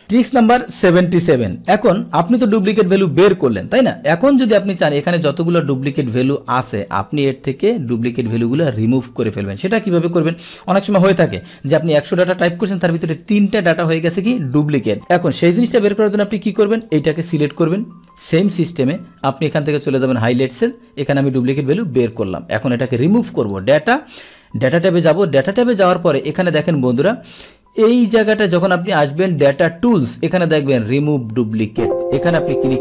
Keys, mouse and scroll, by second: 0.0 click, 1.6 click, 2.7 click, 4.9 click, 5.9-9.5 scroll down 1, 9.5 click, 15.8 click, 16.8 click, 18.4-19.4 drag, 22.2 click, 23.6 click, 25.8 click, 31.5 click.